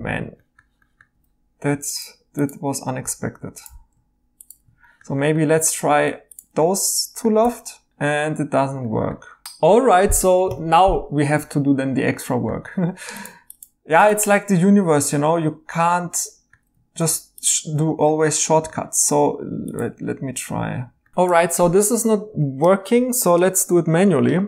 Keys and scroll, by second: 7.4 i, 7.9 Tab, 10.5 Escape.